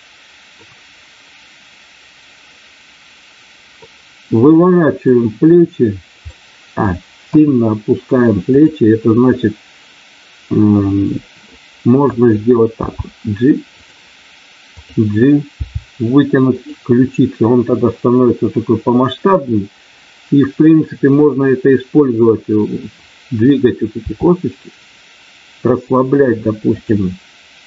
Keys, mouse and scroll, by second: 3.8-5.0 middle drag, 6.3 middle click, 7.3 KP_1, 8.7 click, 12.8 g, 13.8 click, 14.8 click, 15.6 g, 23.9 r.